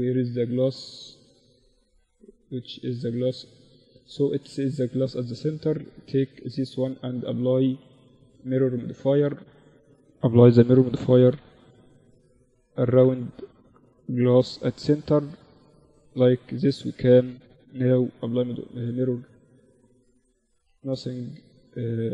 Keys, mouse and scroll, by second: 0.3 z, 1.2 z, 1.8 z, 1.9-4.5 middle drag, 2.0 z, 4.5-6.4 right drag, 6.0-8.8 drag, 10.4-13.3 drag, 14.9-18.9 drag, 19.4-22.1 middle drag.